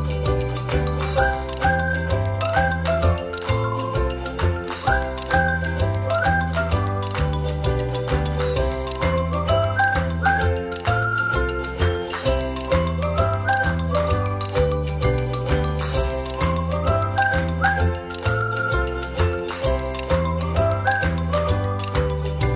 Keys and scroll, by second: 2.9 0, 7.8 space, 9.9 a, 13.6 -, 14.9 a, 17.0 space, 18.5 space.